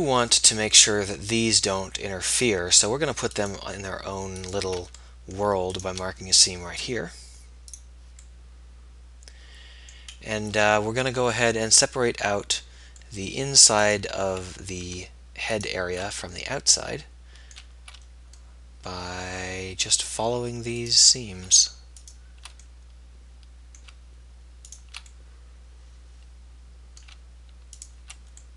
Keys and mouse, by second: 0.4-1.9 middle drag, 3.6-5.4 right drag, 5.4 middle click, 8.9-10.0 middle drag, 10.1 middle click, 11.8 middle click, 16.3 right click, 16.6-17.8 middle drag, 23.1-24.1 middle drag, 26.2 middle click, 28.1 click.